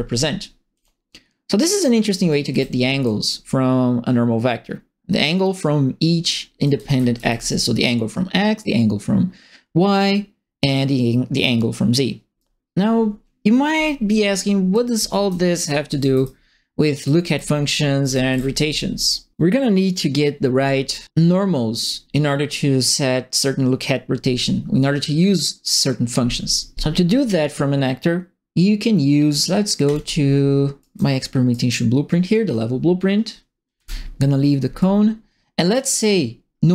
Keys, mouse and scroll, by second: 0.7 click, 2.0-3.0 typing, 2.1 right click, 6.6 right click, 6.7 e, 7.1 d, 12.3 right click, 14.6-19.0 typing, 14.7 click, 15.0 right click, 15.3 click, 15.5 right click, 17.0-19.0 right drag, 29.8 click, 30.8 right click, 31.1-31.5 scroll down 2, 31.5 right click, 32.3 click, 33.7 Delete, 34.7 click.